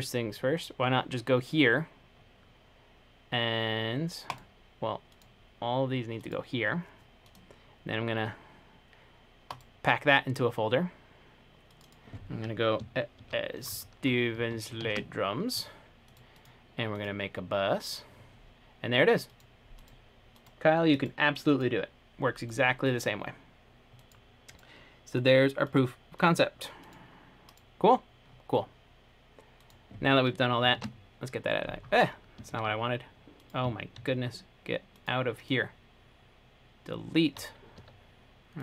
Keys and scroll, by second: 13.1-15.0 typing, 30.9 t, 34.1 t, 38.0 Home.